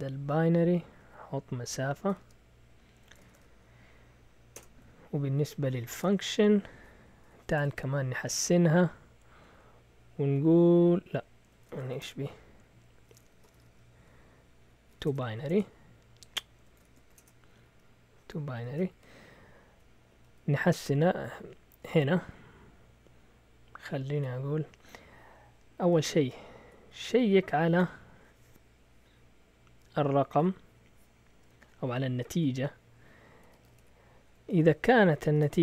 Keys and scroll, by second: 0.0-0.8 typing, 2.2-3.8 typing, 4.5 Return, 5.7-10.3 typing, 8.2 Return, 11.4-15.5 typing, 16.5-21.4 typing, 18.6 Return, 19.0 Down, 20.3 Right, 25.7-27.5 typing, 30.4 typing, 32.1 typing, 33.2-35.6 typing.